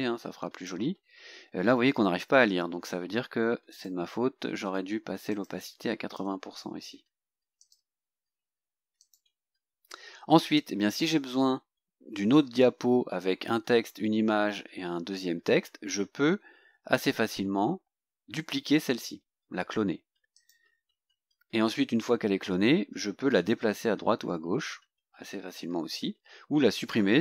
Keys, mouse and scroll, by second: 3.8 click, 5.4 click, 6.2 KP_8, 7.6 click, 9.1 click, 10.0-10.4 scroll down 2, 20.4 click.